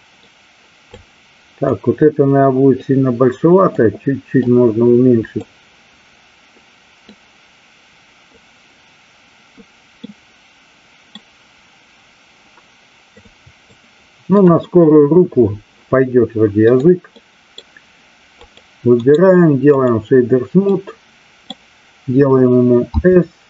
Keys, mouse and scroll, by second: 1.0 click, 2.8 click, 4.4 click, 7.1-8.3 drag, 10.1 middle click, 13.8-14.4 drag, 16.7 click, 17.1-17.5 middle drag, 18.5 click, 18.9 right click, 20.8-21.5 middle drag, 22.8 s.